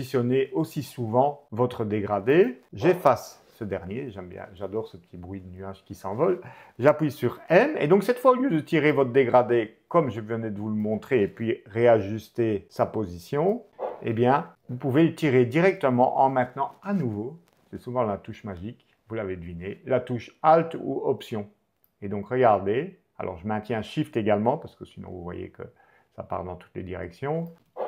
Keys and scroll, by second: 2.6 BackSpace, 6.9 m, 8.7 shift+m, 13.6 BackSpace, 14.5 m, 27.6 alt+BackSpace.